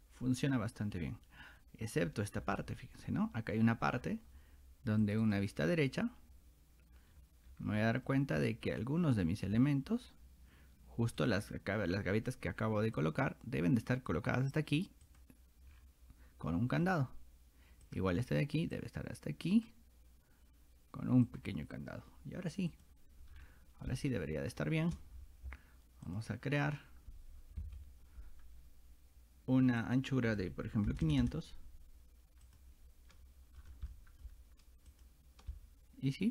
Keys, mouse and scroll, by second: 2.4-3.2 scroll up 3, 2.6 middle click, 3.0 middle click, 4.0 scroll down 2, 5.0 click, 5.2 click, 7.1-7.7 scroll up 4, 7.8 middle click, 8.4 scroll down 2, 9.5 middle click, 9.5 scroll up 2, 11.2 click, 13.0-14.1 drag, 15.1 click, 15.7 scroll down 2, 16.5 middle click, 17.9 click, 18.2 middle click, 18.2 scroll up 2, 18.8 click, 21.3 click, 22.7 click, 23.3 scroll down 2, 23.9-24.9 shift+middle drag, 26.1 click, 29.8 click, 32.5 click, 33.6 middle click, 33.9 shift+middle click, 34.9 click, 35.5-36.3 shift+middle drag.